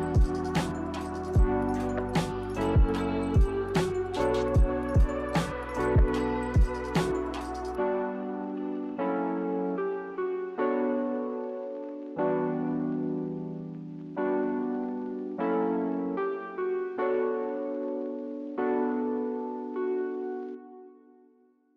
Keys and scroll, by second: 1.1 Delete, 2.6 Delete.